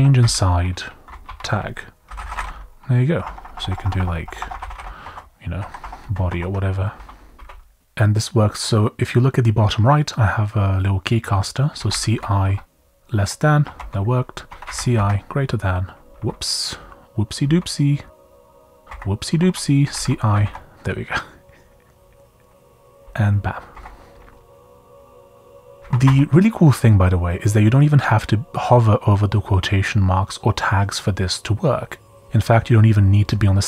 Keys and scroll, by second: 0.0-7.4 typing, 6.3 Escape, 9.8 typing, 11.5-12.4 typing, 13.6 Escape, 13.7-16.1 typing, 16.1 Escape, 17.4 u, 18.1 Down, 18.6 Down, 18.9 Down, 19.1-20.8 typing, 22.6 Escape, 22.9 u, 23.6 Page_Down, 23.7 Page_Down, 24.2 Page_Up, 25.0 Page_Down, 25.8 shift+i, 26.0 Escape.